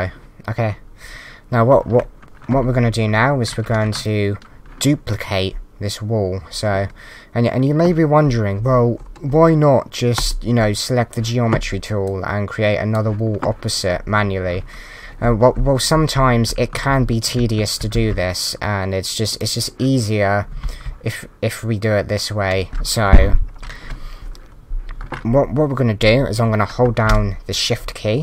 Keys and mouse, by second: 10.2 click, 12.0 click, 15.9 d, 16.2 Left, 17.3-18.4 typing, 19.3 click, 20.5 w, 20.8 d.